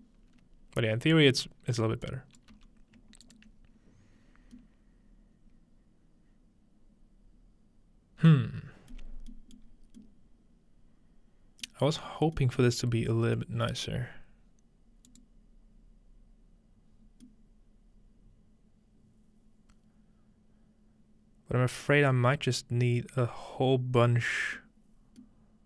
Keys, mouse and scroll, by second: 0.0 middle click, 0.3-2.1 scroll up 4, 2.1 click, 2.5 g, 3.3 ctrl+click, 4.2-5.2 scroll down 1, 5.2-6.4 scroll down 1, 9.2-9.7 scroll down 1, 9.7 scroll up 1, 9.8 scroll down 1, 15.1-16.4 drag, 17.2-25.6 middle drag.